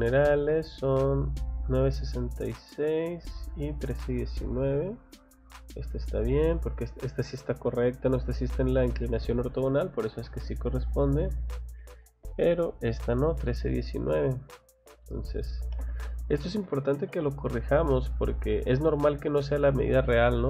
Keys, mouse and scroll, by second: 0.0 middle click, 0.5 middle click, 0.8 scroll up 1, 1.7 scroll down 1, 2.2 middle click, 2.5 scroll up 1, 3.8 scroll down 1, 4.0 middle click, 4.4 scroll up 1, 5.6 scroll up 1, 5.9 scroll down 1, 6.3 middle click, 7.1 scroll up 1, 8.2 scroll down 2, 10.2 middle click, 11.2 scroll down 2, 11.9 scroll up 2, 12.6 scroll up 2, 13.1 scroll down 1, 13.5 middle click, 13.8-14.4 scroll up 1, 14.4 click, 17.9 click, 18.3 scroll down 2, 19.3 scroll up 2.